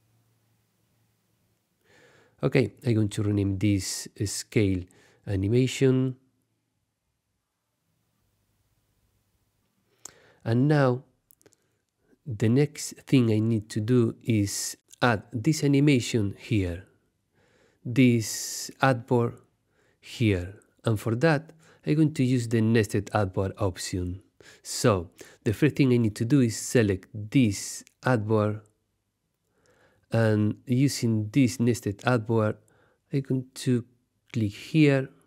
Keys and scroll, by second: 1.4 space, 3.4-7.2 typing, 10.7 Tab, 11.6 super+Tab.